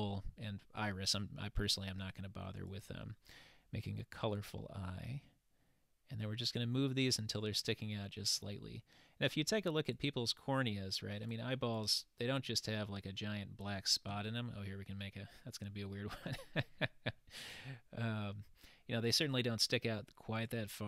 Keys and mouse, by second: 4.4-6.6 drag, 7.6-8.6 middle drag, 10.0-11.4 drag, 14.4-15.4 middle drag, 20.4 click.